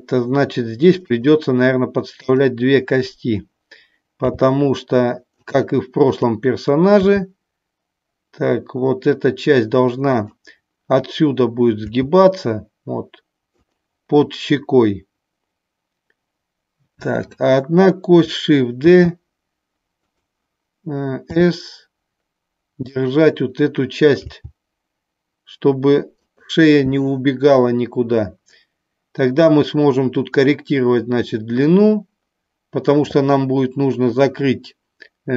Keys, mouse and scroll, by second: 2.3 click, 5.4 click, 10.1 click, 13.5 click, 17.1 click, 20.0 click, 21.2 s, 26.1 click, 26.1 g.